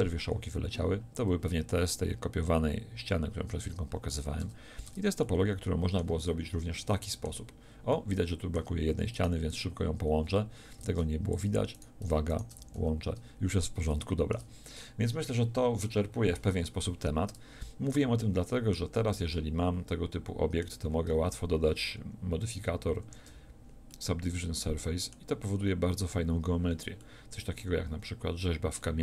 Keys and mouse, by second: 3.6 a, 4.0 z, 4.4 Tab, 4.8 Tab, 10.7 ctrl+Tab, 12.5 f, 12.7 a, 13.8 click, 18.8 Tab, 23.0 ctrl+3.